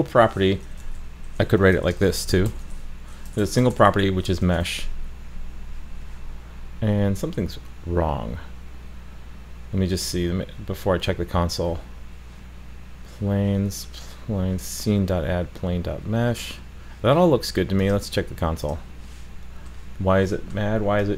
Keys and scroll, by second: 4.6 super+s.